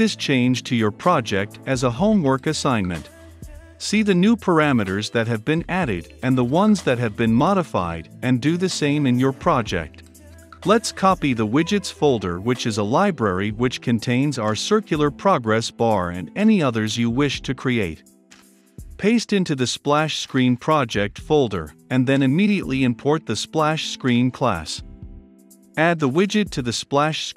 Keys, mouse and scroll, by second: 1.4-3.1 drag, 4.7-6.3 drag, 6.5 ctrl+F5, 10.6 click, 10.9-12.3 right drag, 12.3-17.9 drag, 17.9-19.9 right drag, 19.9-23.7 drag, 23.6-25.5 typing, 25.5 click, 26.5 Tab, 26.9-27.3 typing.